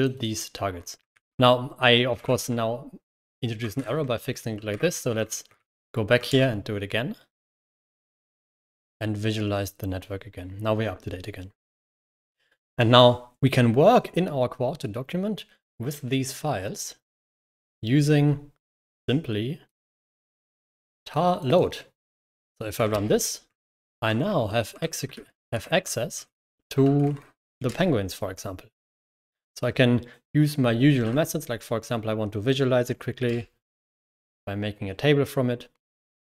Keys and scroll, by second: 1.0 ctrl+h, 2.1 ctrl+6, 3.5 a, 3.8 Escape, 4.6 ctrl+s, 4.8-5.6 typing, 6.2 ctrl+Return, 7.4-7.8 typing, 8.5 ctrl+Return, 9.4 typing, 22.0 Escape, 22.8 ctrl+Return, 23.4-28.0 typing, 25.6 Escape, 26.1 ctrl+h, 30.9 l, 33.4-33.8 typing.